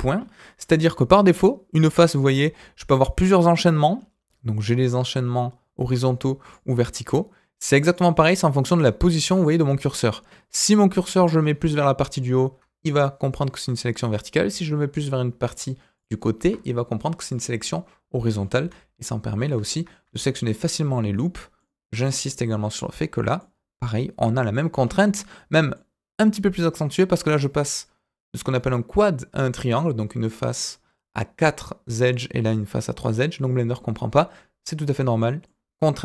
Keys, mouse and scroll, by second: 0.1 scroll up 2, 2.4-2.8 scroll up 1, 2.8 alt+click, 4.0-5.9 scroll down 2, 6.4 alt+click, 7.8 alt+click, 8.6 alt+click, 9.1 alt+click, 9.4-11.1 scroll up 2, 12.1 alt+click, 15.9 alt+click, 16.7-17.3 scroll down 3, 17.3-18.3 middle drag, 18.6 s, 20.4 alt+click, 21.1 middle click, 23.3-24.6 middle drag, 24.7-25.2 scroll up 2, 25.2 middle click, 34.1-34.6 scroll down 2, 34.9 middle click.